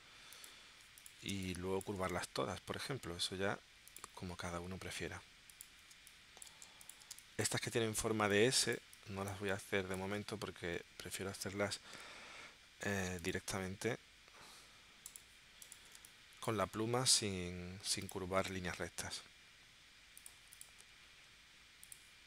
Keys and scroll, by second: 1.3 space, 5.9 space, 7.1 space, 8.2 space, 16.0 space.